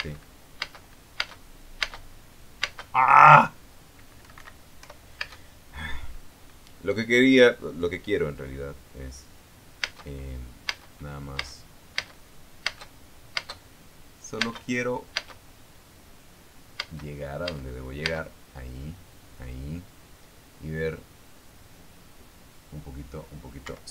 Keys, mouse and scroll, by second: 0.0 space, 1.6 space, 3.9 space, 4.9 Escape, 5.5 p, 6.4 space, 10.5 space, 11.6 space, 15.7 space, 17.6 space.